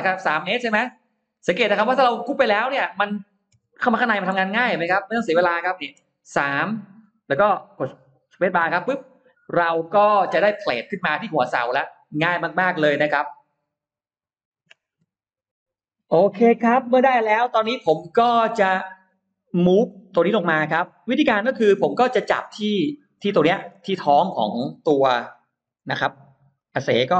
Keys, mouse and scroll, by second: 0.1 middle click, 0.4-0.7 scroll down 1, 0.7 space, 0.9 click, 1.6 middle click, 2.4 middle click, 3.5 m, 3.7 click, 5.8 3, 6.2 Return, 8.6 space, 9.9 Escape, 10.0 middle click, 10.5 scroll up 2, 10.8-11.9 scroll down 4, 14.6 F9, 16.1-16.4 scroll down 2, 16.4 middle click, 17.5-17.8 scroll up 1, 18.5 click, 19.8-21.7 scroll up 2, 21.6 middle click, 22.5-24.0 scroll up 6, 23.1 middle click, 25.1 middle click, 25.7 m, 26.4 click.